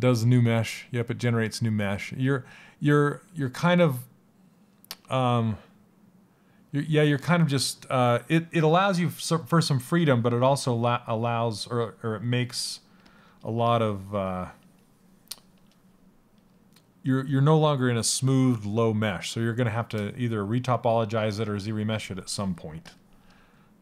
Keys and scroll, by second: 12.6 s.